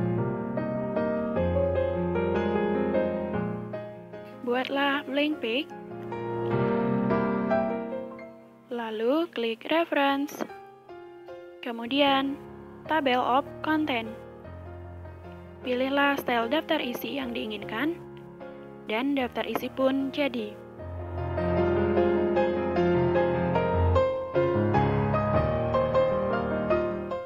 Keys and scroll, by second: 18.0 BackSpace.